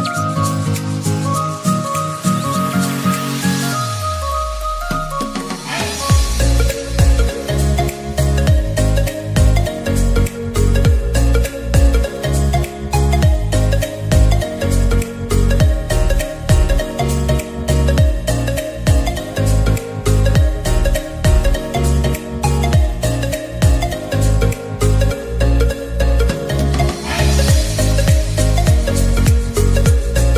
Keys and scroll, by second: 15.3-16.4 typing.